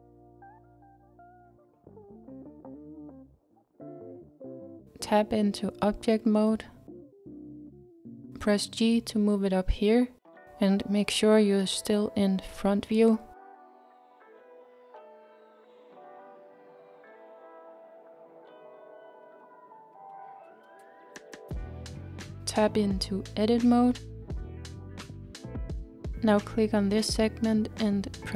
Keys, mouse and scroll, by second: 23.7 Tab, 25.9 click, 26.8-28.3 scroll up 2.